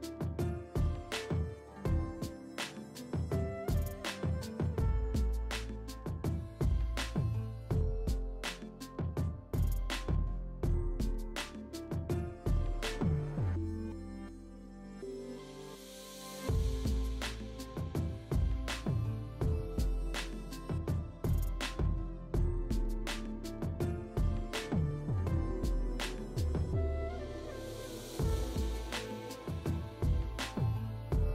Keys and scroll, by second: 6.7 space, 12.3 F9, 17.1 space, 17.4 [, 18.9 [, 20.9 ], 22.1 space, 30.8 space.